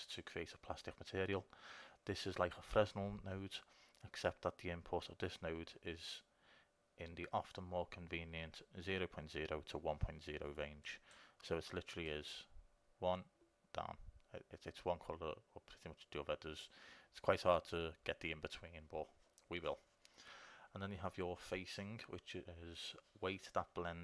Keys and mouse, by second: 11.0-15.0 drag.